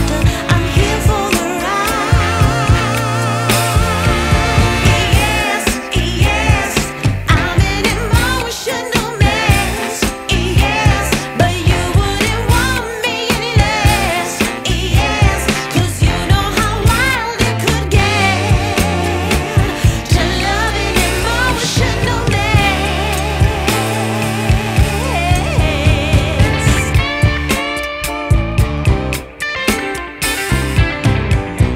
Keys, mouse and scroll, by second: 0.6-1.0 scroll down 2, 1.0 middle click, 1.5-2.2 scroll up 4, 2.2 middle click, 2.5-3.2 scroll up 2, 3.2-3.5 scroll down 4, 3.5-5.4 middle drag, 5.4 click, 7.7-12.2 drag, 12.2 scroll up 1, 12.3 middle click, 13.1 scroll up 1, 13.4-15.1 middle drag, 15.1-15.8 scroll down 4, 15.8-17.0 scroll down 3, 17.0 KP_0, 18.1 click, 19.7 g, 22.5-23.2 scroll down 3, 23.2 middle click, 23.4 scroll up 1, 23.6-24.4 scroll down 10, 24.4-26.5 middle drag, 26.5 KP_0, 28.1 shift+a, 29.9 s.